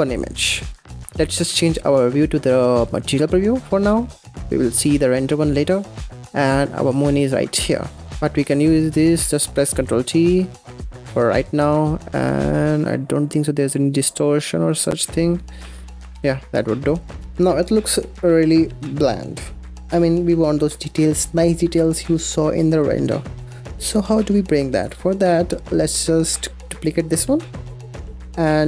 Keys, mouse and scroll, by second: 0.9-1.3 middle drag, 1.3 z, 6.0-7.2 middle drag, 7.2 scroll up 2, 7.5 scroll down 3, 7.7 scroll up 3, 7.9 scroll down 1, 8.2 middle click, 8.5 click, 9.7 ctrl+t, 10.0-10.4 scroll down 4, 10.4-15.2 middle drag, 15.2-15.5 scroll up 3, 15.5 middle click, 15.8-16.1 scroll down 4, 16.1 ctrl+shift+z, 16.4 click, 16.7-19.0 middle drag, 19.9-22.7 middle drag, 22.7-23.6 scroll down 2, 23.6-24.2 middle drag, 24.2-24.6 scroll up 2, 24.7 click, 24.9 scroll down 3, 25.2 middle click, 25.9-26.2 scroll up 5, 26.3 middle click, 26.6 click, 26.8 shift+d, 27.5-28.0 scroll up 4, 28.0 click, 28.5 drag.